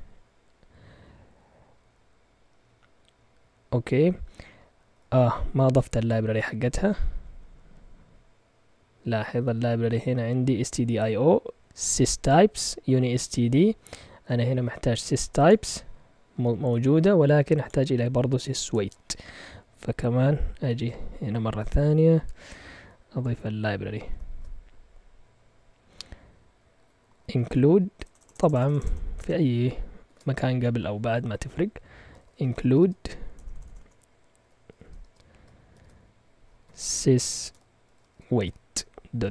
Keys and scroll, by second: 4.8-7.1 typing, 20.8 ctrl+Tab, 24.1 typing, 26.5-30.0 typing, 31.8-39.3 typing.